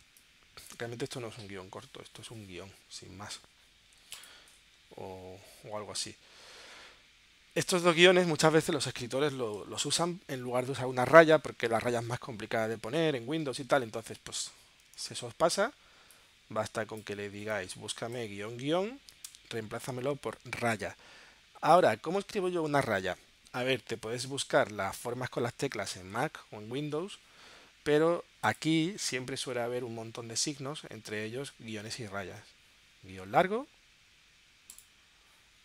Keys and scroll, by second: 0.4 space, 15.4 super+f, 19.3 Tab.